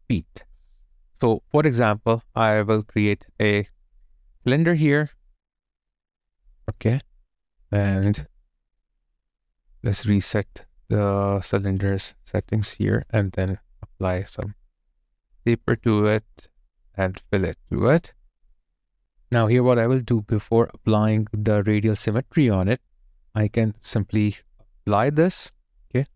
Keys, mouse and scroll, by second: 7.9 ctrl+z, 8.7 ctrl+z, 19.0 alt+right click, 25.9 space.